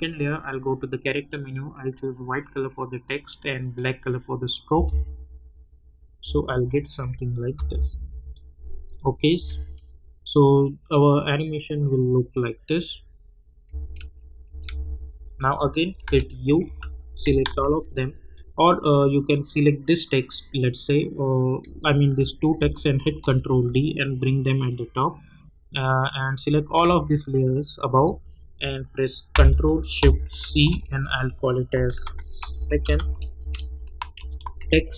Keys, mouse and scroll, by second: 4.7 space, 7.5 -, 7.7 -, 8.3 click, 9.2 drag, 9.3 space, 13.6 space, 15.3 click, 16.0 u, 16.6 u, 17.4 ctrl+a, 18.3 click, 21.9 shift+click, 23.0 ctrl+d, 23.7-26.4 drag, 24.9-26.4 drag, 27.8 shift+click, 30.4 ctrl+shift+c, 31.6-34.9 typing.